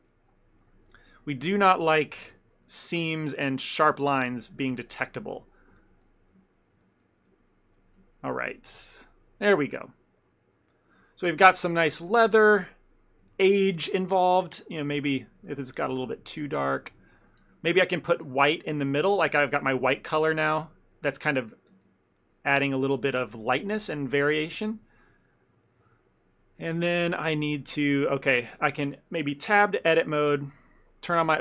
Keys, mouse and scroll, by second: 0.1 ctrl+middle click, 0.8 f, 1.9 click, 2.4 f, 2.6 middle click, 3.0 click, 3.3 click, 4.0 ctrl+click, 4.3 ctrl+click, 4.9 ctrl+click, 4.9 click, 5.2 middle click, 5.4 shift+middle click, 5.9 ctrl+click, 6.1 ctrl+click, 6.9 ctrl+click, 7.5 ctrl+click, 7.9 ctrl+click, 8.1 ctrl+click, 8.3 middle click, 8.9 ctrl+click, 9.5 ctrl+middle click, 9.7 middle click, 10.0 middle click, 10.3 middle click, 11.0 ctrl+middle click, 11.2 ctrl+middle click, 11.4 shift+middle click, 11.5 shift+middle click, 11.6 ctrl+middle click, 12.5 ctrl+middle click, 13.0 middle click, 13.4 ctrl+middle click, 13.6 middle click, 13.8 ctrl+middle click, 14.1 shift+middle click, 14.3 ctrl+middle click, 14.9 click, 15.3 click, 15.9 click, 16.0 ctrl+middle click, 16.2 middle click, 16.5 middle click, 16.6 shift+middle click, 17.0 shift+middle click, 17.1 ctrl+middle click, 17.4 f, 17.8 click, 18.1 click, 18.7 middle click, 19.2 click, 19.4 click, 19.5 click, 20.1 middle click, 20.3 middle click, 21.2 shift+middle click, 21.6 click, 21.8 click, 22.2 middle click, 23.0 middle click, 23.4 click, 23.5 click, 23.8 ctrl+middle click, 24.0 ctrl+middle click, 24.3 ctrl+middle click, 24.7 shift+middle click, 24.8 shift+middle click, 24.9 ctrl+middle click, 25.3 ctrl+middle click, 25.6 middle click, 25.9 shift+middle click, 26.0 ctrl+middle click, 27.1 shift+middle click, 27.3 ctrl+middle click, 27.9 ctrl+middle click, 28.4 middle click, 29.9 Tab, 31.3 click.